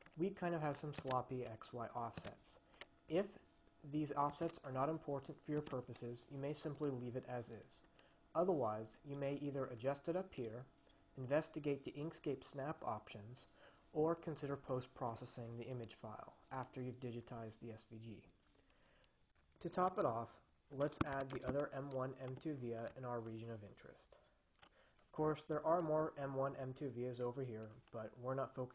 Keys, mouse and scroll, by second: 1.2 click, 2.4 click, 4.4 click, 21.0 ctrl+click, 21.4 ctrl+c, 21.7 ctrl+v, 22.7-25.4 drag.